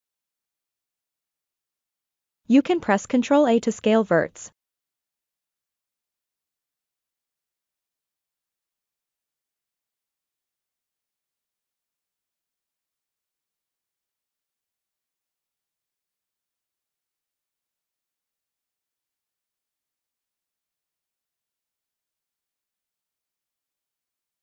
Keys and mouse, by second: 0.8 shift+click, 1.5 shift+click, 2.1 shift+click, 3.4 ctrl+a, 17.9 ctrl+a, 21.6 click, 22.2 shift+click, 23.7 ctrl+a.